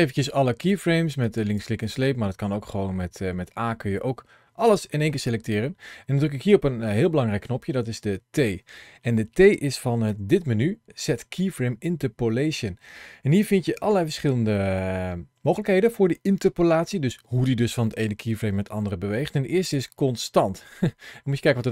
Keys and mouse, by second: 1.1 click, 2.5 a, 9.9 t, 21.6 space.